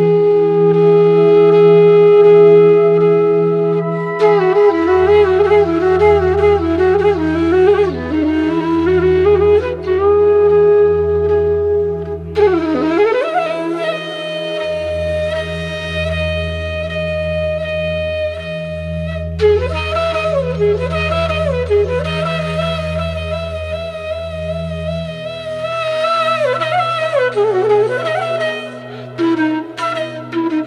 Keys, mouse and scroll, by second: 9.1-10.3 drag, 17.3 click, 20.4-21.0 scroll up 1, 22.8-28.0 drag, 28.5 ctrl+a, 29.1 ctrl+x, 29.6 click.